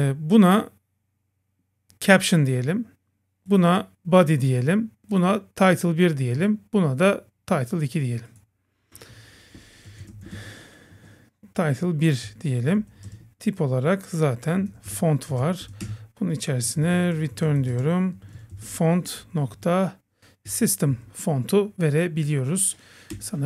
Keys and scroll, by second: 15.9 Return, 20.5 Down, 23.2 Return.